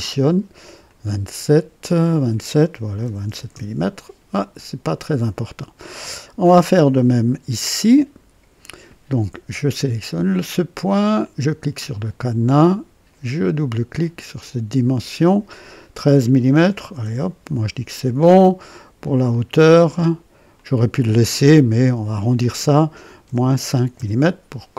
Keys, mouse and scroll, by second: 0.8 click, 3.0 KP_2, 3.2 KP_7, 3.5 Return, 7.9 click, 11.1 click, 13.9 click, 16.5 KP_1, 16.8 KP_3, 17.0 KP_Enter, 20.5 click, 23.2 KP_Subtract, 23.6 KP_5, 23.9 KP_Enter.